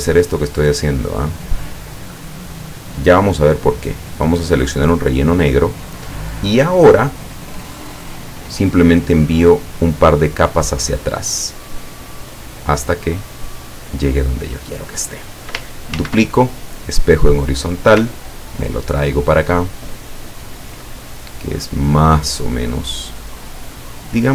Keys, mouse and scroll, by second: 0.7 click, 1.5 click, 5.1 click, 8.4 click, 11.7 click, 12.5 click, 16.0 ctrl+d, 16.9 click, 18.3-20.9 ctrl+drag, 21.4 middle click, 22.7-24.3 drag.